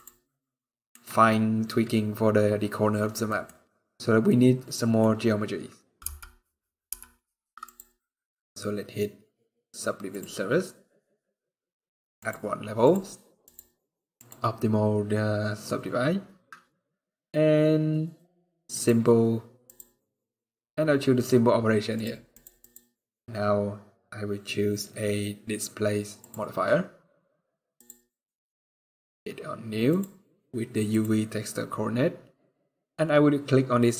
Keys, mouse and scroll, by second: 0.2 middle click, 1.4 scroll down 2, 1.9 scroll up 2, 3.0 middle click, 4.0 middle click, 5.8 n, 6.6 n, 7.4 click, 27.5 click, 28.9 scroll up 2, 29.6 click.